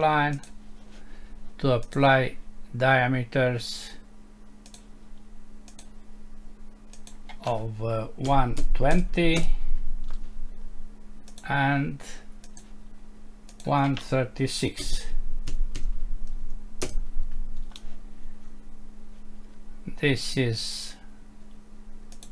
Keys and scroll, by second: 9.4 Return, 16.8 Return.